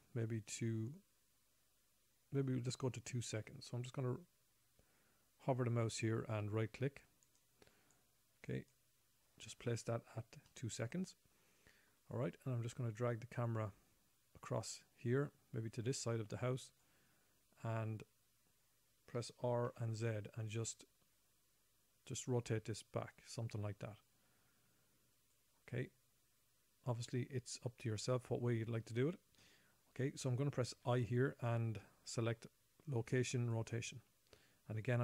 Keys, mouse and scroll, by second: 7.6 right click, 8.3 right click, 10.8 middle click, 13.5 click, 19.5 r, 31.1 i, 33.9 i.